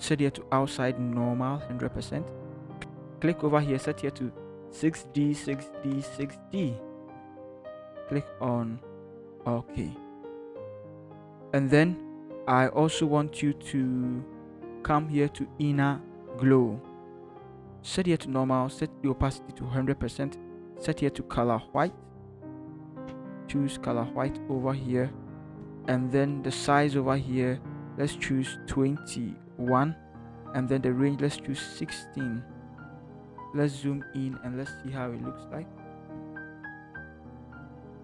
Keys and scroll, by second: 0.1 6, 2.8 6, 4.5-6.6 typing, 34.9 ctrl+=, 35.2 ctrl+=.